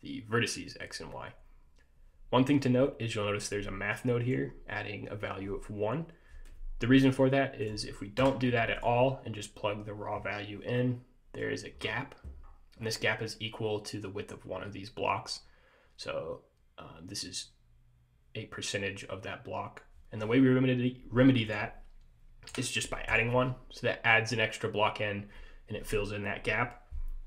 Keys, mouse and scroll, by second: 4.1 click, 7.8 click, 10.9 middle click, 11.6-12.7 scroll up 6, 12.9-13.5 scroll down 2, 21.6 click.